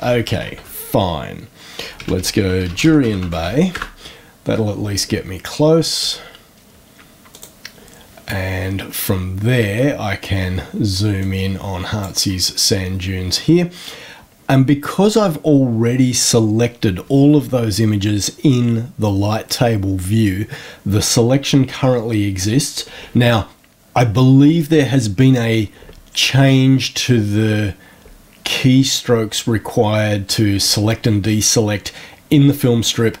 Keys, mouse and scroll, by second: 0.4 shift+Home, 1.7-3.9 typing, 7.3 click, 9.5-10.0 scroll up 1, 11.1-12.1 drag.